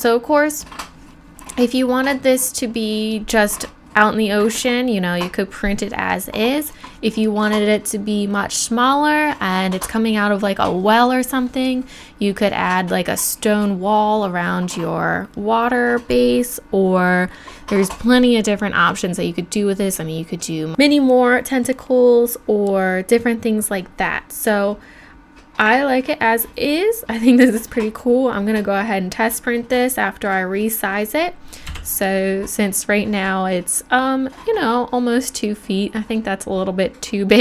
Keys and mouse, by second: 31.7 n.